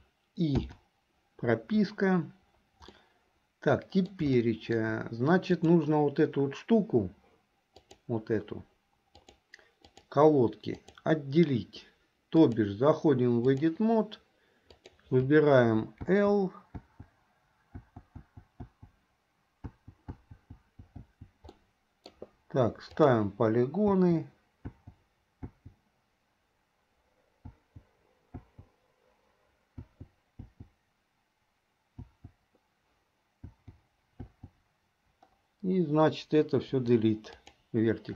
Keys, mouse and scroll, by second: 0.7 i, 3.1-4.4 middle drag, 4.5 shift+middle click, 5.7 click, 7.8 click, 9.4-10.2 drag, 10.9 click, 12.4-13.8 drag, 14.8 click, 16.0 l, 16.9 l, 18.1-21.2 typing, 21.6 middle click, 23.2 click, 24.1 l, 25.0 l, 25.6 l, 27.5 l, 28.7 l, 29.9 l, 30.6 l, 32.3 l, 33.6 l, 34.4 l, 36.7 Delete.